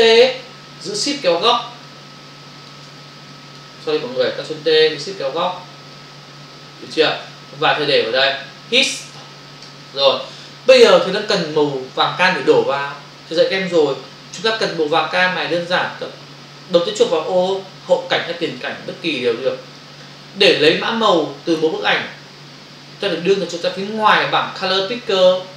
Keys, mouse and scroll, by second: 1.9 shift+click, 3.3 click, 4.0 Escape, 5.9 shift+click, 7.5 click, 9.9 Return, 18.5 click, 19.8 click.